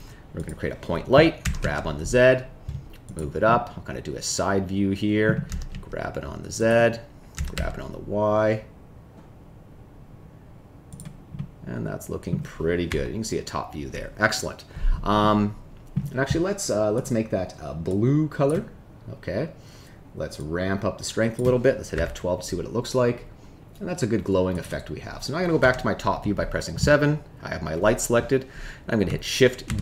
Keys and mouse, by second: 1.4 g, 1.6 z, 3.0 click, 3.4-5.2 middle drag, 5.4 g, 5.7 z, 7.3 g, 7.5 y, 11.3 middle click, 12.8 KP_7, 15.2 middle click, 16.9 click, 20.3-21.3 drag, 22.2 F12, 25.5 KP_7, 29.6 shift+d.